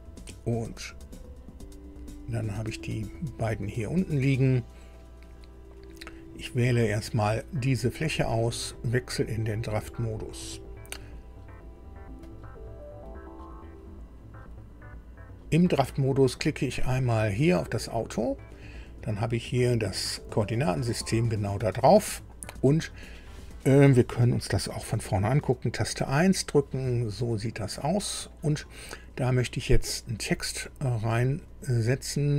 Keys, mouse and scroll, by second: 0.7 click, 2.6-2.9 scroll down 1, 6.7 click, 8.7 click, 12.2 click, 17.7 click, 25.9 KP_1, 27.5 scroll up 2, 28.1 scroll up 2, 30.5 click.